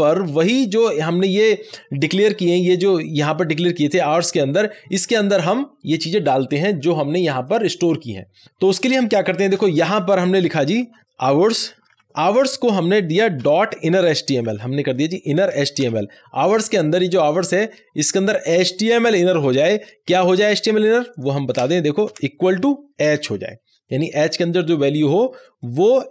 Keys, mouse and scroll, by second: 7.4 click, 9.5 Tab, 10.8-12.3 typing, 13.4-14.9 typing, 15.5 Down, 15.8 Return, 18.3 Return, 18.4-21.1 drag, 21.5 space, 22.0 =, 23.0 space, 23.2 h, 25.4-26.1 drag.